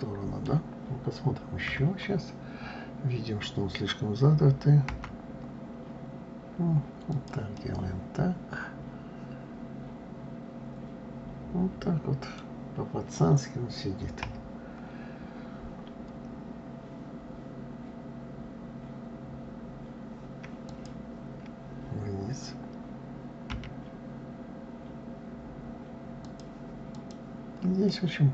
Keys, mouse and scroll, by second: 1.7 KP_3, 7.6-10.6 middle drag, 14.2 KP_1, 20.7 click, 23.5 g, 26.9 click, 27.9-28.3 middle drag.